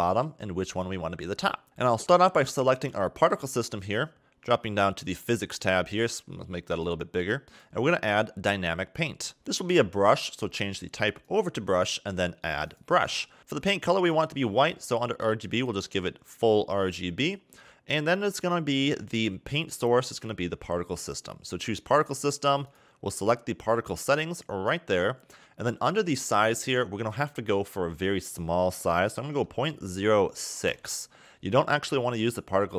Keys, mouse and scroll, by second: 0.6 click, 2.6 click, 4.8 click, 6.6 click, 8.8 click, 9.4 click, 10.4 click, 12.5 click, 13.0 scroll down 2, 13.4 click, 13.6 click, 17.2 scroll down 2, 18.2 click, 21.4-22.0 scroll down 1, 22.0-22.4 scroll down 2, 22.4 click, 24.9-25.5 scroll down 4, 26.9 click.